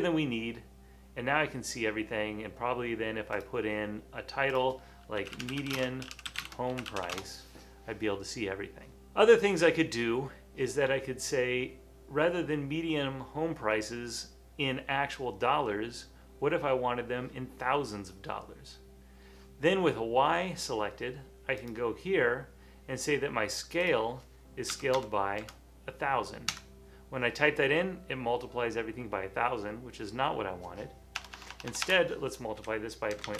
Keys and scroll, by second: 5.0-7.6 typing, 24.8 typing, 26.5 Return, 26.5 typing, 31.3-33.3 typing.